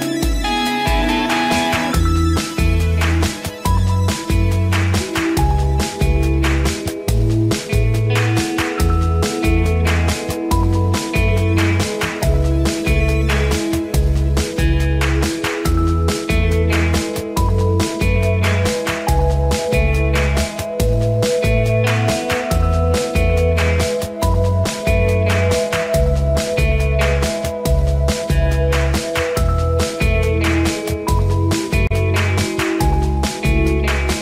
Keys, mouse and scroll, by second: 0.1 click, 21.9-31.4 drag.